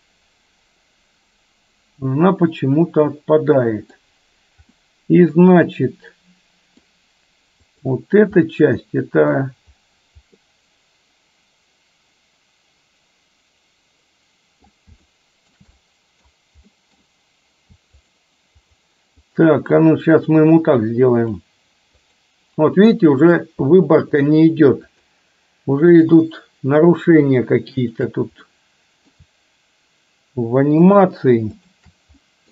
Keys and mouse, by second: 4.9-7.0 middle drag, 7.7 click, 8.5-9.5 middle drag, 10.5-14.7 middle drag, 15.1-15.6 shift+middle drag, 15.7-16.4 middle drag, 16.7 middle drag, 18.7 shift+click, 20.1 shift+click, 22.1 shift+click, 23.0 shift+click, 24.2 shift+click, 25.0 shift+click, 26.0 shift+click, 27.9 shift+click, 28.5-29.1 middle drag, 31.0 shift+click, 31.6 shift+click, 32.2 middle click.